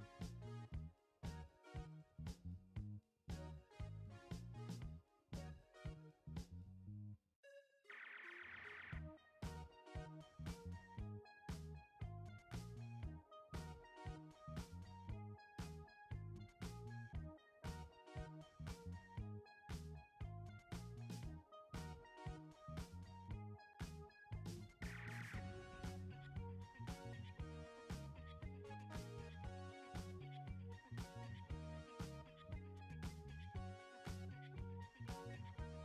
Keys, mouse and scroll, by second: 2.6 alt+scroll down 1, 3.3 space, 3.4 click, 3.8 space, 4.2 click, 4.6 space, 5.7 click, 6.1 space, 6.9 click, 7.4 space, 7.6 click, 7.9 space, 8.5 space, 9.1 space, 9.7 click, 11.0 alt+scroll up 1, 12.9 alt+click, 16.7 alt+scroll down 1, 21.0 alt+scroll down 1, 21.1 ctrl+0, 23.0 ctrl+j, 25.4 click, 28.1 click, 31.9 shift+9, 33.9 click.